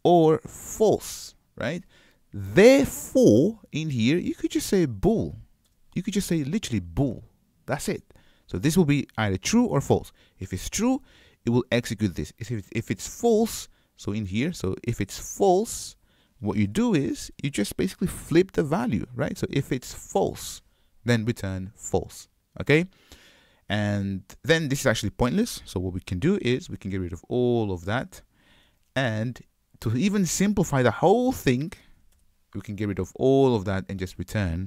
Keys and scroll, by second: 16.8 alt+BackSpace, 26.4 super+y, 29.0 super+y.